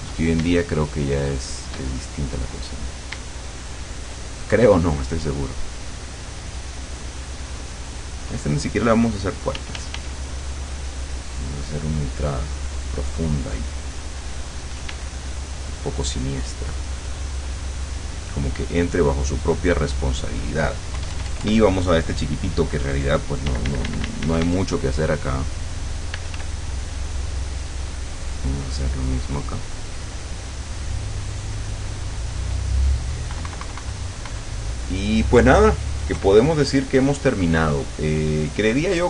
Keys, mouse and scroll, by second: 0.4 shift+click, 3.4 shift+click, 9.6 f, 10.4-14.9 drag, 14.9 d, 15.3-20.0 drag, 21.0 KP_Add, 23.5 d, 25.2-26.2 drag, 26.2 f, 26.5 click, 27.4-32.8 drag, 33.4 KP_Subtract, 36.2 KP_Add.